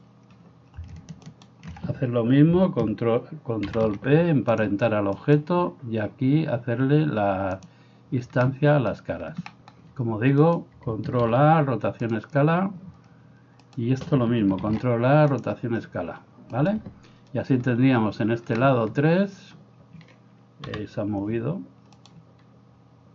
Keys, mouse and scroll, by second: 1.3 shift+middle click, 1.3 shift+right click, 3.7 ctrl+p, 5.3 middle click, 5.3 right click, 7.8-13.6 middle drag, 10.5 right click, 11.2 ctrl+a, 13.6 right click, 13.9-16.7 ctrl+middle drag, 14.6 ctrl+a, 16.7 right click, 16.8-22.0 middle drag, 20.7 KP_7, 22.0 right click, 22.2-23.1 middle drag.